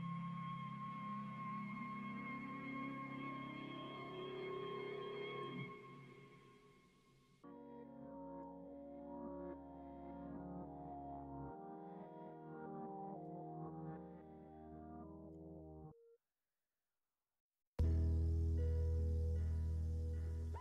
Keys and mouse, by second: 2.5-3.5 drag, 4.5-5.6 drag, 6.6-8.3 drag, 8.5 ctrl+z, 12.0-13.4 drag, 14.6 click, 15.3 ctrl+z, 15.6 ctrl+z, 16.2-20.6 drag.